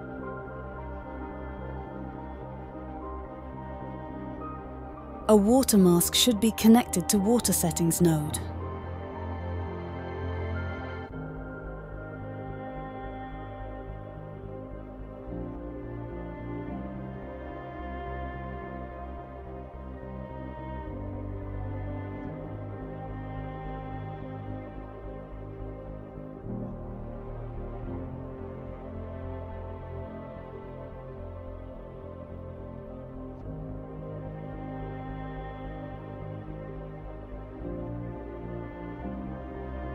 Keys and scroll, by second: 0.0-1.4 typing, 4.2 typing, 9.7-11.2 typing, 12.7-13.0 typing, 14.5-17.8 typing, 16.6 Return, 21.8-24.2 typing, 33.5-35.3 typing, 37.7-38.5 typing.